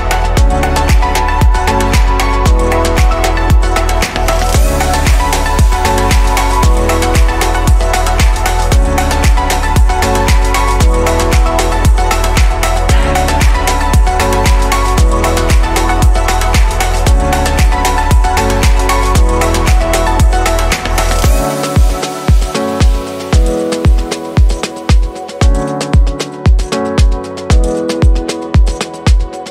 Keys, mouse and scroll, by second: 3.9-5.4 middle drag, 5.4 drag, 7.2 click, 8.2-9.0 middle drag, 9.0-11.1 scroll up 1, 11.1-12.3 shift+middle drag, 12.3 click, 13.8-14.9 middle drag, 14.9 s, 16.6 right click, 24.1-25.9 right drag, 25.9 q, 27.2-29.5 middle drag.